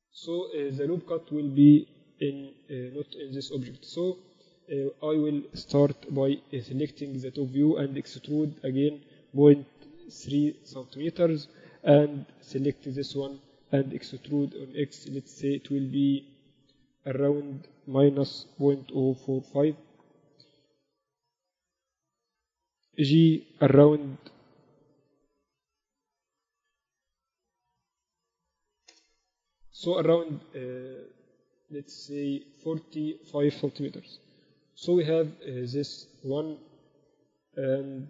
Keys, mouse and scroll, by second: 1.9 x, 4.6 z, 5.3 a, 5.7 a, 6.1 b, 8.2 e, 10.9 a, 12.0 b, 13.9 e, 21.0 h, 22.1 ctrl+z, 23.1 g, 26.5 g, 34.1 KP_8, 34.6 KP_6, 34.9 z.